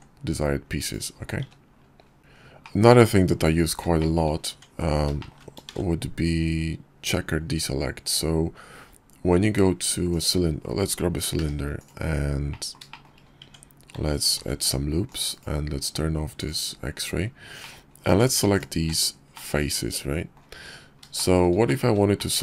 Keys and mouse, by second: 0.6 `, 2.2 middle click, 3.1 shift+middle click, 3.6 Tab, 4.8 shift+a, 10.4 g, 11.6 click, 11.9 shift+middle click, 12.5 Tab, 13.4 ctrl+r, 16.7 click, 17.2 Tab, 18.4-19.4 middle drag, 20.3 shift+click, 20.8 middle click, 21.2 shift+middle click, 22.2 middle click.